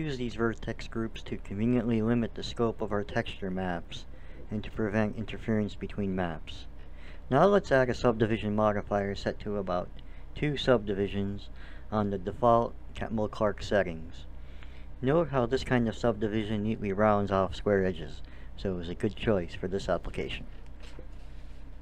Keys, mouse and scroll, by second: 2.5 a, 7.0-9.7 drag, 11.3-13.0 drag, 13.0-14.6 middle drag, 15.2 middle click, 15.9-18.6 middle drag.